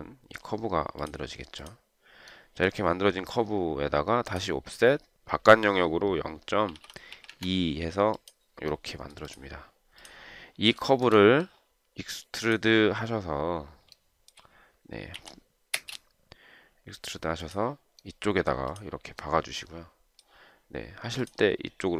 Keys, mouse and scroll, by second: 6.7-7.8 typing, 11.1 shift+right click, 14.2 shift+right click, 15.5 b, 16.0 space.